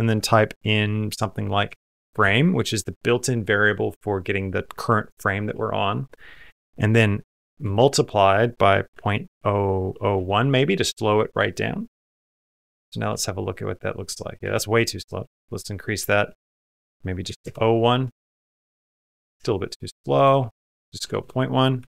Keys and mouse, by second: 12.9 space, 14.2 space, 15.0-17.2 drag, 16.4 BackSpace, 17.9 space, 19.2 space, 19.7-21.8 drag, 21.0 BackSpace.